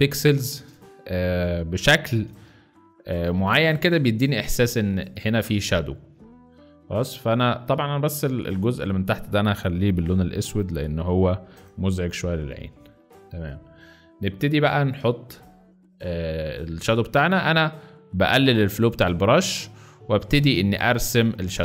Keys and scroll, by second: 0.6 space, 2.0-4.0 typing, 11.5 ctrl+alt+BackSpace, 12.6 ctrl+alt+z.